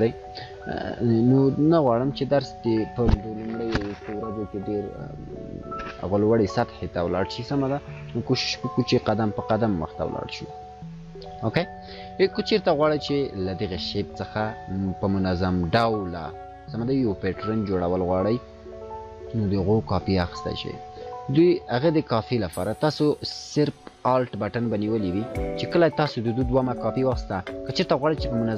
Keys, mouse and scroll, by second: 0.5-2.4 drag, 10.5 scroll up 1, 17.1 scroll up 1, 17.2-21.2 drag, 22.1 ctrl+z, 25.6-28.5 alt+drag.